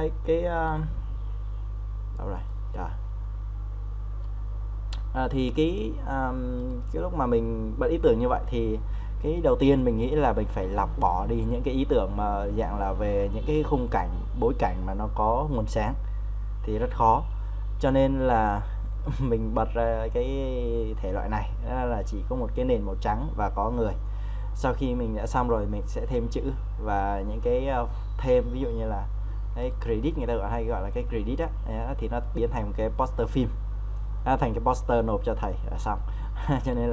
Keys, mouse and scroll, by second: 28.8-29.6 scroll up 1, 29.6 click.